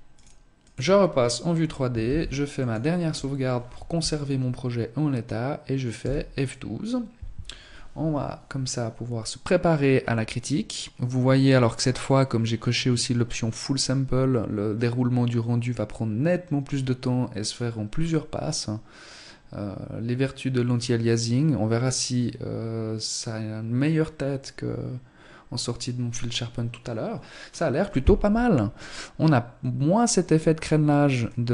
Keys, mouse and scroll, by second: 0.8 ctrl+s.